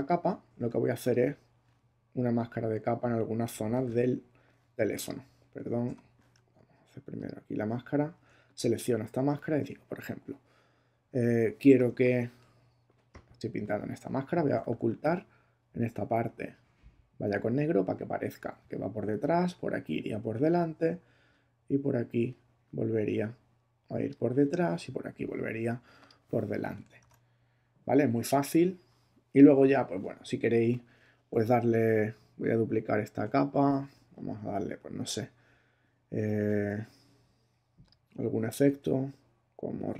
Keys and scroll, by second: 3.7 super+s, 5.8 super+d, 12.0 b, 14.2 x, 14.6 shift+<, 27.0 super+d, 33.2 super+j.